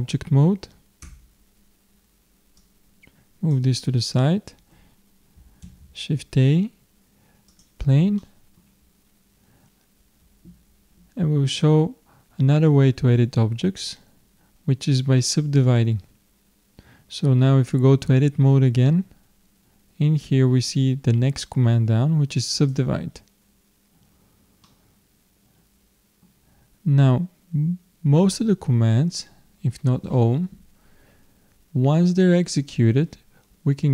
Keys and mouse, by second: 1.0 Tab, 2.6-4.1 drag, 4.2 click, 5.6 shift+a, 8.2-15.5 middle drag, 15.5-18.1 drag, 18.1 Tab, 22.5-24.3 drag, 24.6-26.3 middle drag.